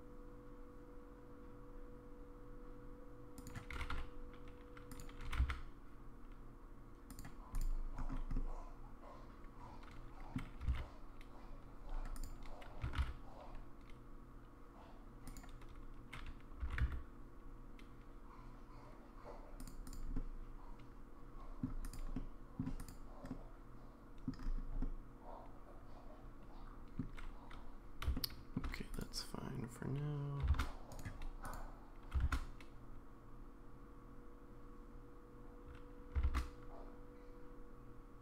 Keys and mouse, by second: 3.7 g, 5.2 g, 7.6-8.0 drag, 8.4-10.4 middle drag, 10.6 g, 12.2 click, 12.2 x, 12.8 g, 16.6 r, 20.1-21.6 middle drag, 21.8 click, 22.1-22.6 middle drag, 22.8 click, 23.3-24.3 middle drag, 24.8-27.0 middle drag, 28.1-28.6 shift+middle drag, 29.0-30.4 drag, 30.5 shift+d, 32.2 shift+d.